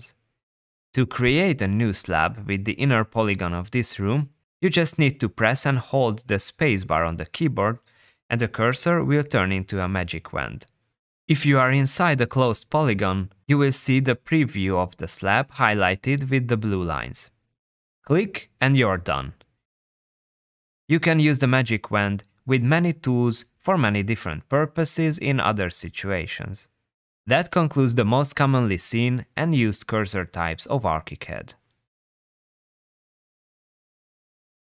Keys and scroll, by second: 6.7 space, 27.7 space.